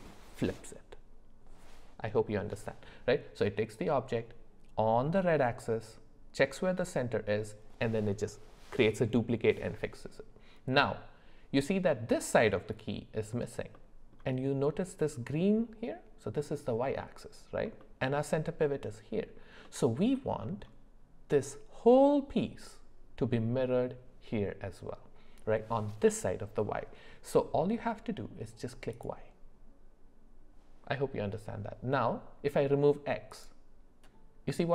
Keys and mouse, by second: 10.7-11.8 middle drag, 13.7 middle click, 17.8 middle drag, 19.6 middle click, 20.4 middle click, 28.9 click, 33.3 click.